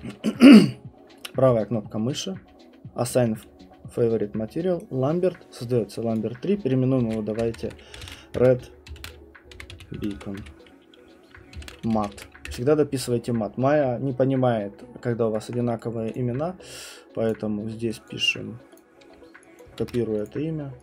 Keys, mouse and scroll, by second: 4.8 right click, 6.1 click, 6.7-12.6 typing, 15.8 right click, 16.1 click, 17.3 click, 18.1 click, 19.6 click, 19.8 ctrl+c, 20.3 click.